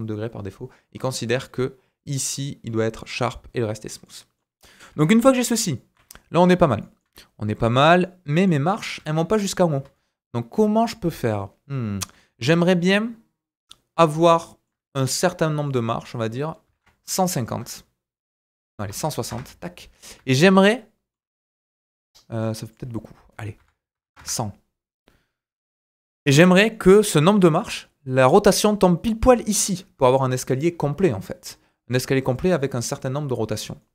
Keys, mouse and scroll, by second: 3.8 scroll down 2, 4.0 middle click, 4.9 KP_1, 5.4 scroll down 2, 5.7 shift+middle click, 6.0-6.7 scroll up 4, 6.7-7.0 shift+middle drag, 7.6 click, 8.0-14.2 right drag, 8.0 middle click, 8.9 KP_1, 9.6 scroll down 2, 9.9 shift+middle click, 14.2-14.6 shift+drag, 14.4 shift+middle click, 14.6-15.6 right drag, 15.6 click, 18.8 BackSpace, 19.9 scroll down 2, 20.3 shift+middle click, 22.6 click, 24.0 KP_0, 26.7-33.9 middle drag, 30.2 KP_7, 30.9 scroll down 2.